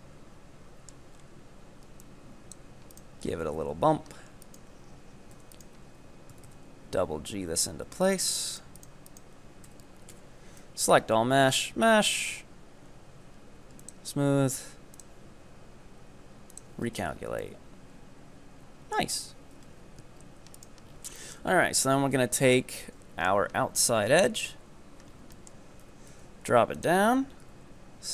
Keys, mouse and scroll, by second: 1.2-2.0 scroll up 2, 2.0 scroll up 1, 2.1 click, 2.9 right click, 3.3 scroll down 5, 3.6 KP_3, 4.5 ctrl+right click, 5.4 f, 5.6 right click, 6.4 g, 8.6 ctrl+right click, 9.1 ctrl+right click, 9.7 f, 10.1 a, 11.5-14.5 drag, 15.0-17.0 drag, 17.0 Tab, 17.2 scroll down 4, 17.5-19.3 middle drag, 19.3 KP_3, 19.6 Tab, 20.2 scroll up 2, 20.7 right click, 21.0 scroll down 5, 21.2 shift+middle click, 21.6-22.5 scroll up 6, 22.5 ctrl+right click, 22.8-24.1 middle drag, 24.1-24.5 scroll down 5, 24.5 KP_3, 25.1 scroll up 3, 25.4 shift+middle click, 25.9 e, 27.5 s.